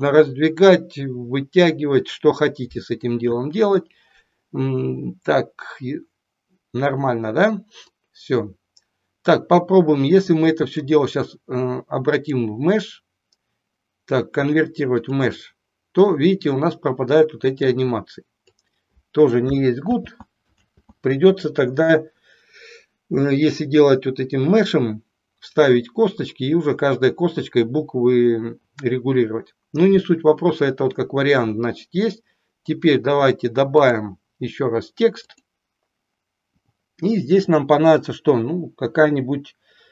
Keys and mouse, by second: 7.8-10.8 drag, 12.2-15.2 drag, 17.7 click, 19.8 ctrl+z, 20.5 ctrl+z, 33.7-35.4 drag.